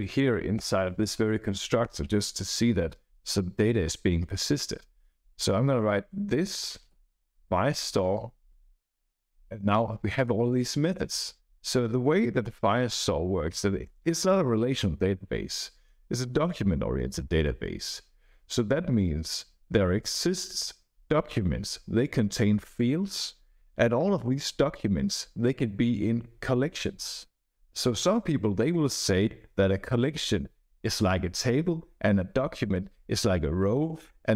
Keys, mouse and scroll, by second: 0.5 Return, 1.8 Return, 4.8 Up, 5.3 Return, 5.6-8.4 typing, 10.4 Down, 10.6 Down, 10.9 Down, 11.4 Up.